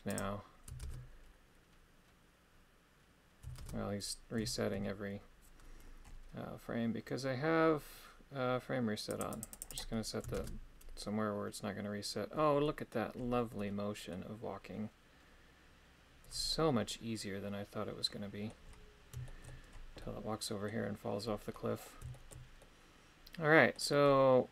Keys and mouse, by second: 0.1 click, 9.1 click, 9.3 click, 9.5 click, 9.7 click, 12.6-24.5 middle drag.